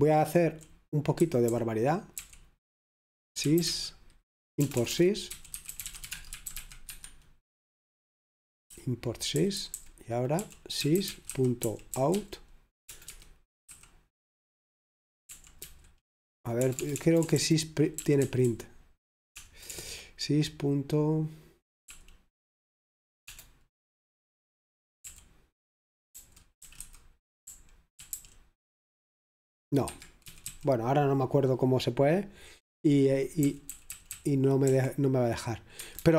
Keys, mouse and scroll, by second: 0.0-4.8 typing, 6.1-7.1 typing, 8.4-8.8 typing, 10.4-13.7 typing, 15.4 typing, 17.0-19.6 typing, 22.0 p, 23.4 BackSpace, 25.1 typing, 26.6-28.7 typing, 30.0 Escape, 30.5 typing, 33.5 k, 34.1 k, 35.9 Escape, 36.0-36.1 typing.